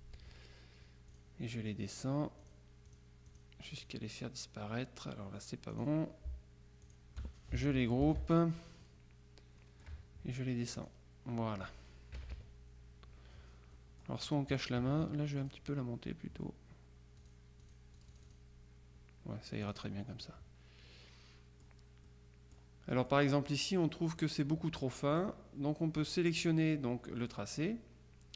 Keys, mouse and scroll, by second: 1.2 click, 2.7-4.5 drag, 5.8 click, 6.9 shift+click, 8.1 ctrl+g, 8.9 click, 10.9 click, 12.3 KP_Subtract, 13.8 middle click, 15.5 click, 17.3-18.9 drag, 19.7-20.4 drag, 22.1 click, 23.0 middle click, 23.5 click, 24.0 click, 25.2 click, 26.5 click.